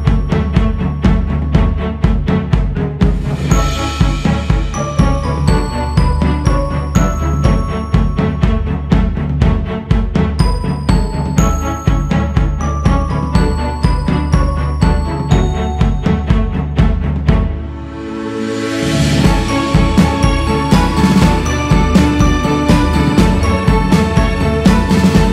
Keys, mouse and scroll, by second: 0.0-1.2 scroll up 9, 1.5-6.0 drag, 6.0-6.7 scroll up 3, 6.7-14.9 drag, 14.9-15.9 scroll down 3, 17.5-21.0 shift+middle drag, 21.0 scroll up 6, 22.3-25.3 drag.